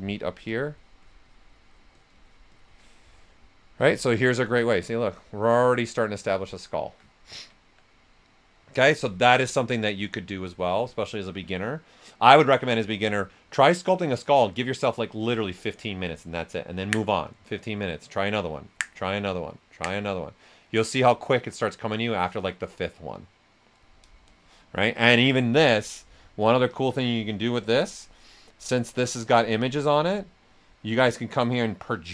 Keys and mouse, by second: 3.8 click, 4.1 alt+right click, 4.4 right click, 7.1 ctrl+right click, 8.0 right click, 26.7-29.3 drag, 31.9-32.1 drag.